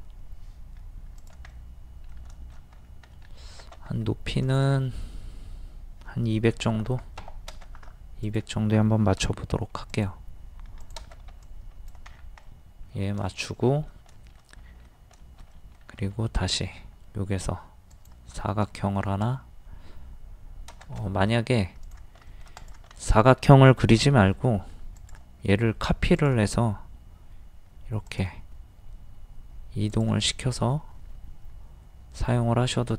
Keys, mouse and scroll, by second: 1.5 middle click, 2.8 scroll up 1, 3.1 middle click, 3.9 t, 4.4 click, 6.5 KP_2, 8.2 click, 9.2 typing, 11.3 e, 12.1 scroll down 1, 12.5 middle click, 13.3 shift+middle click, 14.1 shift+middle click, 15.2 shift+middle click, 16.1 r, 16.4 scroll up 1, 17.9 click, 18.7 shift+middle click, 21.3 scroll down 1, 21.8 click, 22.3 shift+middle click, 23.0 shift+middle click, 24.0 m, 25.0 ctrl+click, 26.6-26.9 scroll up 1, 28.1 click, 30.3 middle click.